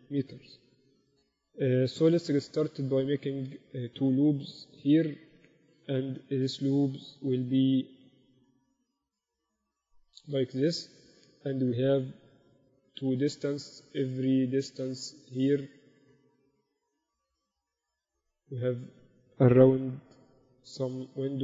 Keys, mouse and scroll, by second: 1.5 Tab, 2.9-4.7 drag, 3.3-6.5 middle drag, 5.1 ctrl+r, 6.7 s, 11.7 ctrl+r, 14.4-16.2 drag, 14.5 a, 15.1 right click, 16.2 right click, 20.2 ctrl+b.